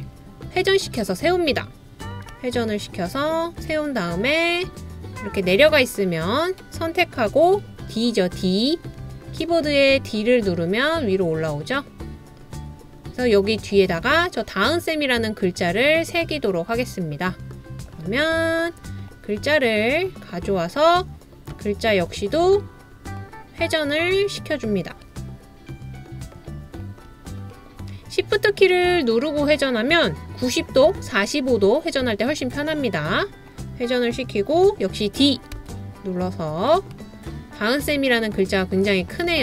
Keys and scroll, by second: 9.0 d, 35.6 d, 35.7 d.